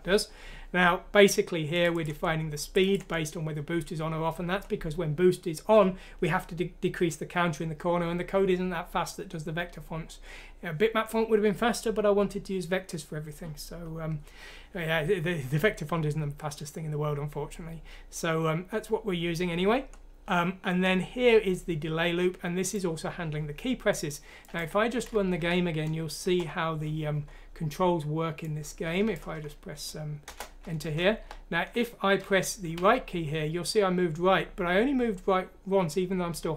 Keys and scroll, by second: 25.4 F6, 26.2 Return, 30.2 Return, 31.3 Tab, 32.7-34.8 typing.